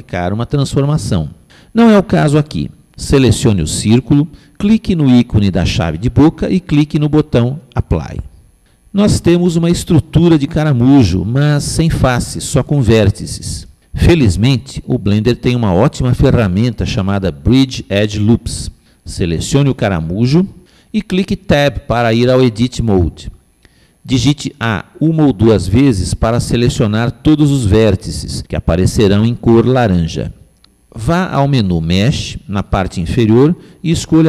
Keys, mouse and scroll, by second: 3.7 click, 7.1 click, 22.5 Tab, 25.8 a, 26.3 a.